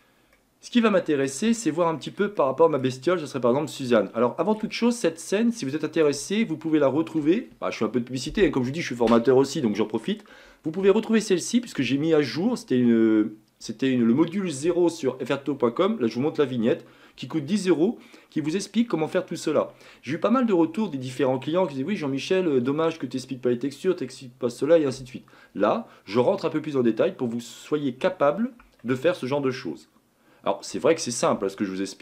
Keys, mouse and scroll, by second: 0.4-3.1 middle drag, 3.1-3.5 scroll up 3, 3.9-4.9 shift+middle drag, 4.9-5.3 scroll down 1, 5.3-7.2 middle drag, 7.2-9.0 shift+scroll up 1, 18.9-26.9 middle drag, 26.9-28.9 scroll up 3, 28.9-31.1 shift+middle drag, 31.1-31.5 scroll down 1, 31.5-32.0 shift+middle drag.